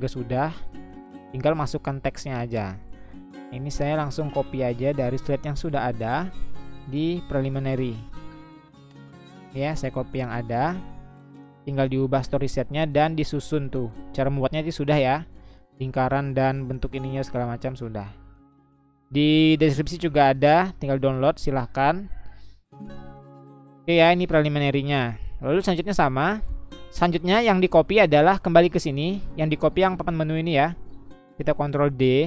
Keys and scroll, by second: 3.2 Delete, 6.1 Delete, 12.5 ctrl+c, 15.6 ctrl+v, 31.7 ctrl+d.